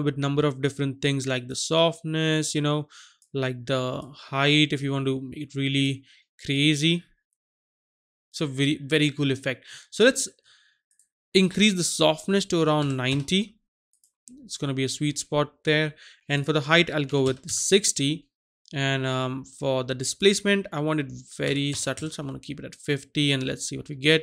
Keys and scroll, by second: 12.8 KP_9, 13.2 KP_0, 17.1 KP_6, 17.3 KP_0, 17.4 Return, 21.5 KP_5, 21.7 KP_0, 21.9 Return.